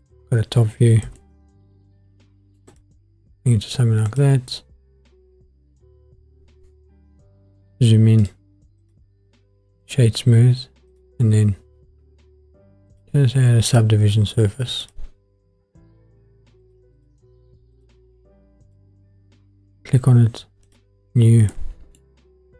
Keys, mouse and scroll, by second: 1.0 g, 1.2 middle click, 2.7 click, 4.1 click, 7.3-8.2 scroll up 2, 8.2 right click, 9.8-12.9 right drag, 12.9-15.0 drag, 16.6-19.0 drag, 20.7-21.5 drag, 21.5 middle click.